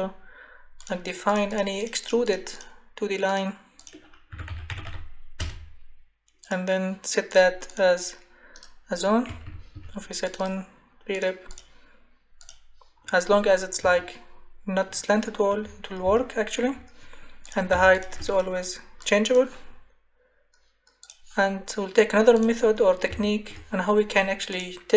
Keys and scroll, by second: 4.0-5.4 typing, 9.3 Escape.